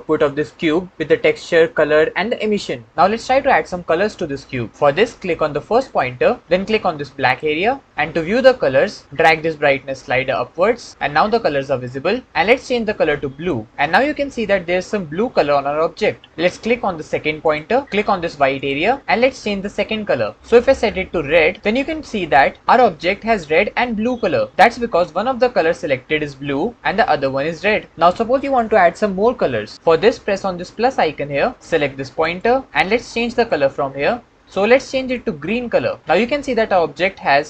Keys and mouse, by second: 7.2 click, 18.5 click, 30.8 click, 32.1 click.